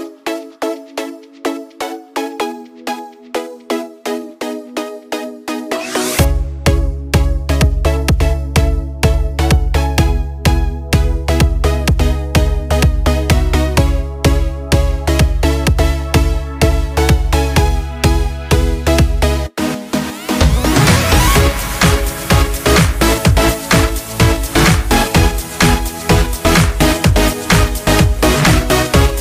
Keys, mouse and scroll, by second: 3.8 click, 17.2 click, 18.9-20.2 scroll down 1, 20.2-21.7 scroll up 1, 21.7-26.4 drag, 28.2 right click.